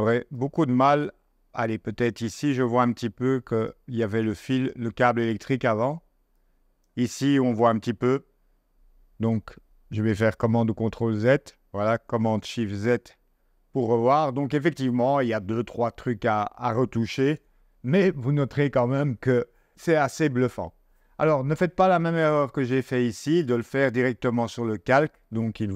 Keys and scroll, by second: 10.6 super+z, 17.3 0.